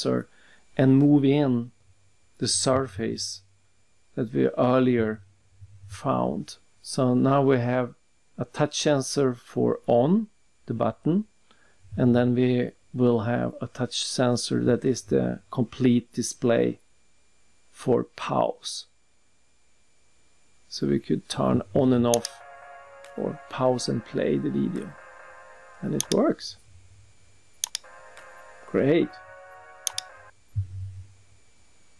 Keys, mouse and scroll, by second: 2.4 click, 7.0 shift+click, 9.2 click, 11.3 click, 11.7 click, 12.1-13.7 typing, 13.7 click, 15.9 click, 16.6 click, 20.2 click, 20.5 click, 21.3-21.7 scroll down 2, 22.1 click, 26.0 click, 27.7 click, 29.9 click, 30.6 click, 31.6 click.